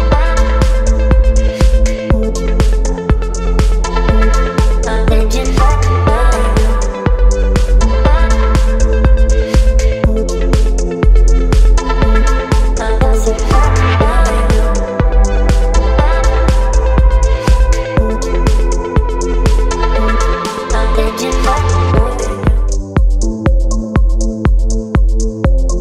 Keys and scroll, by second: 7.7 ctrl+b, 19.5 space, 23.7 KP_4, 24.2 Return.